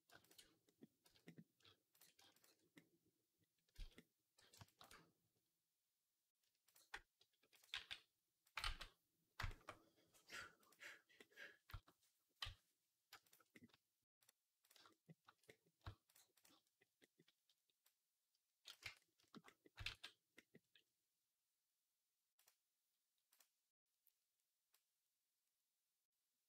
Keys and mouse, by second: 0.1 click, 0.1-1.8 middle drag, 0.9 z, 1.8 shift+click, 1.8 shift+middle click, 2.2 shift+click, 2.4-6.5 middle drag, 3.6 z, 4.2 b, 6.5 shift+click, 6.6-13.1 shift+middle drag, 7.6 g, 8.5 ctrl+z, 12.3 z, 13.1 click, 13.2 middle click, 13.9 click, 14.0 middle click, 14.4 click, 14.5-16.2 middle drag, 16.2 shift+click, 16.3-17.7 shift+middle drag, 17.7-26.4 drag, 18.7 Tab, 19.7 ctrl+s.